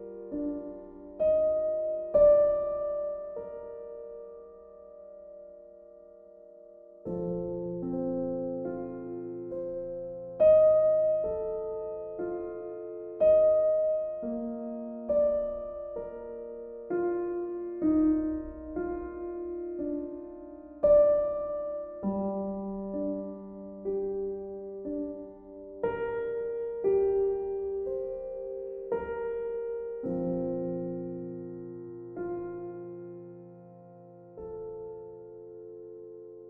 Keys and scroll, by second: 23.3 b, 24.1 ctrl+z.